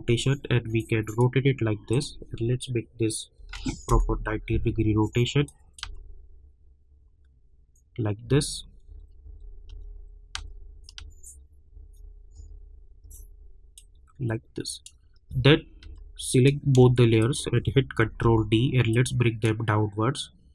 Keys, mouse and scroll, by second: 3.9 Return, 5.4 click, 5.8 space, 8.2 space, 13.7-15.3 drag, 15.3 space, 16.3 click, 17.2 shift+click, 18.0 ctrl+d, 18.9-20.5 drag.